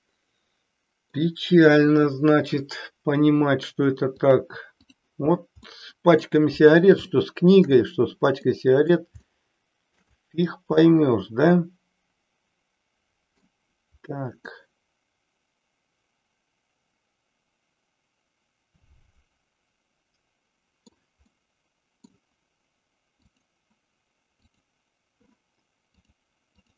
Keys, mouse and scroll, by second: 4.2 click, 5.7 middle click, 7.1-7.9 shift+middle drag, 8.5-9.0 middle drag, 9.2-10.1 shift+middle drag, 10.9-13.5 middle drag, 14.6-21.1 middle drag, 21.5-22.1 middle drag, 26.0-26.7 drag.